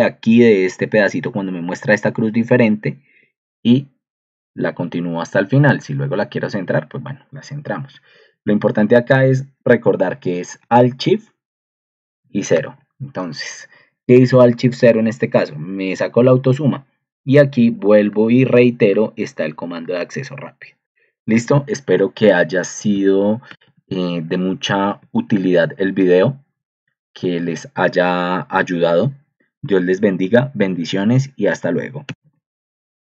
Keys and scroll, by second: 8.1 ctrl+shift+Down, 8.7 shift+Down, 12.1 alt+shift+0, 12.5 ctrl+2, 23.5 ctrl+alt+2, 25.0 ctrl+alt+1, 27.0 ctrl+2, 32.0 ctrl+End, 32.6 Escape.